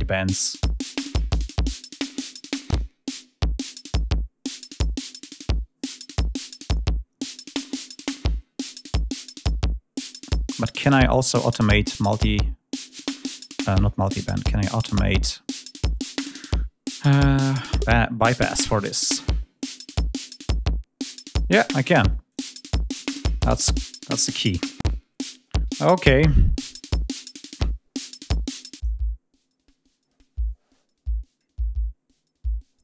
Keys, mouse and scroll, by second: 0.1 click, 1.7 click, 4.6-5.9 drag, 8.9 click, 9.9 click, 12.1 click, 13.8 click, 17.0 click, 22.1 click, 23.4 scroll down 1.